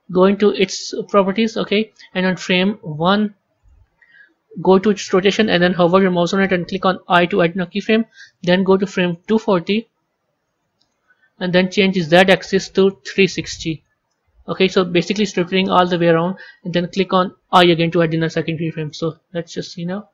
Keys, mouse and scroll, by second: 0.4 click, 3.5-6.5 drag, 9.1-15.0 drag, 18.7 click.